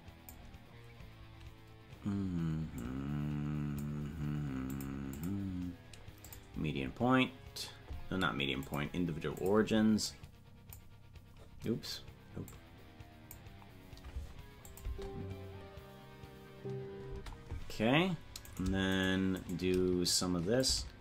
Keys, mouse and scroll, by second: 2.8-4.7 drag, 5.1-6.3 drag, 8.6 click, 10.0 click, 12.4 click, 14.7 click, 14.9 space, 18.5 right click, 19.0 shift+right click, 20.5-21.0 drag.